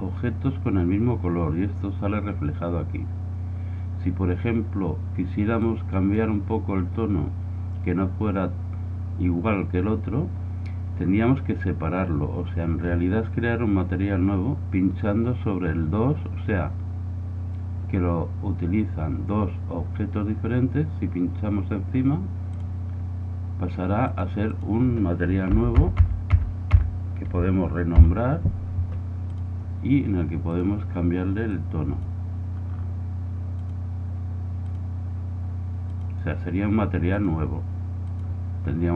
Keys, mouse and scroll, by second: 5.6-25.8 drag, 25.8 BackSpace, 30.6-32.4 drag, 33.7-37.6 drag.